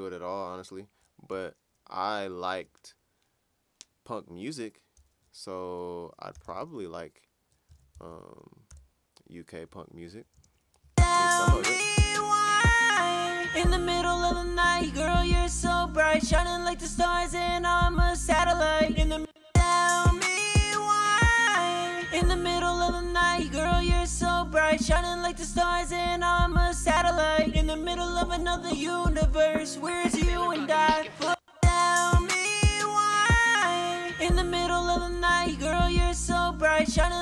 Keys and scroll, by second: 6.1-8.6 typing, 10.3 typing, 15.0-16.8 typing, 18.6 typing, 25.4-26.8 typing, 30.7 typing, 35.1 ctrl+super+w.